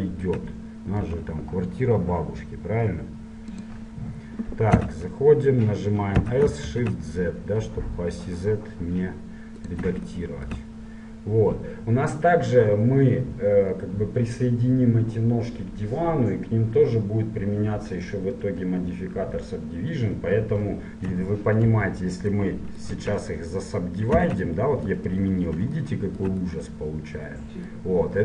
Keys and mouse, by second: 1.3 g, 4.1-6.4 drag, 5.1 Tab, 6.4 s, 10.3-15.8 drag, 21.8 ctrl+1, 23.2 `, 24.5 Tab.